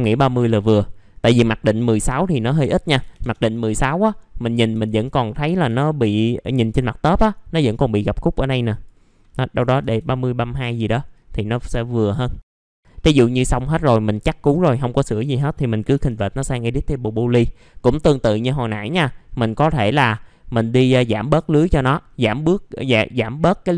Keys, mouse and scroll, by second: 0.2 alt+middle click, 2.0 click, 2.9 KP_1, 4.0-4.7 scroll up 1, 4.7 F4, 5.2-5.6 scroll down 1, 5.7 alt+middle click, 6.4 middle click, 6.7-8.6 scroll up 1, 8.6 click, 9.5 KP_3, 10.6 middle click, 10.7-11.7 scroll down 1, 12.4 scroll down 1, 12.5 middle click, 12.9 scroll down 1, 16.5 middle click, 17.0-18.0 scroll up 1, 18.1 alt+middle click, 19.1 scroll up 1, 19.9 middle click, 20.1-21.3 scroll down 1, 21.4 alt+middle click, 21.9-22.2 scroll up 1.